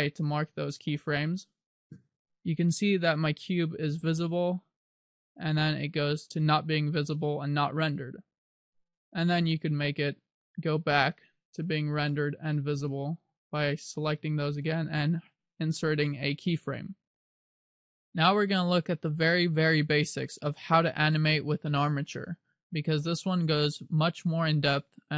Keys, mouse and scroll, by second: 0.7 i, 3.0 click, 11.3 click, 12.4 click, 12.8 i, 14.3 i, 16.5 click.